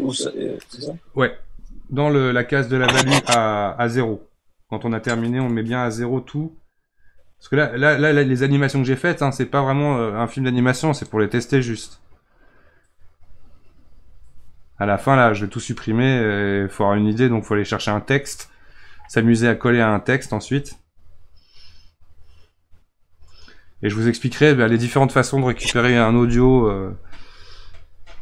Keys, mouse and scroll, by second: 5.4 click, 8.3 scroll up 5, 8.7 scroll down 3, 8.9 scroll up 2, 9.0 scroll down 4, 9.5 scroll up 1, 11.1-14.1 drag.